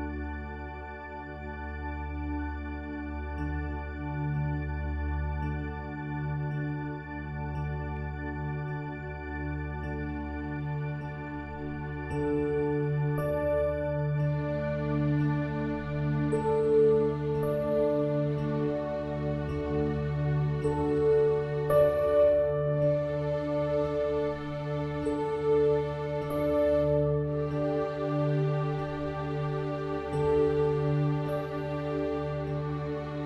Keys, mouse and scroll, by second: 0.2 ctrl+r, 1.4-2.4 middle drag, 2.4 ctrl+r, 3.8 middle click, 4.5 click, 5.4 e, 6.4 ctrl+r, 7.4 ctrl+x, 7.9 ctrl+r, 8.6 ctrl+r, 10.2-11.5 middle drag, 11.4 Tab, 12.0 Tab, 12.3-13.5 middle drag, 13.5 ctrl+r, 15.1 middle click, 15.8 click, 16.4 e, 17.0 ctrl+r, 17.8 ctrl+r, 18.7-20.0 middle drag, 20.0 ctrl+r, 21.4 click, 22.0 g, 23.1 ctrl+r, 24.2 middle click, 24.9-26.2 drag, 25.9 e, 26.7 middle click, 27.3 s, 27.9 ctrl+r, 29.4 ctrl+r, 30.5 click, 31.1 g, 31.5-32.8 middle drag, 32.1 Tab.